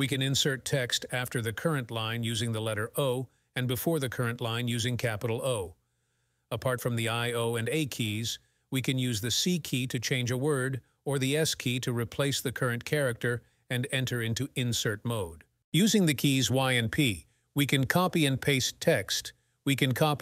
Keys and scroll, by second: 1.9 o, 2.3 a, 4.0 Escape, 4.4 shift+o, 5.2 b, 6.8 Escape.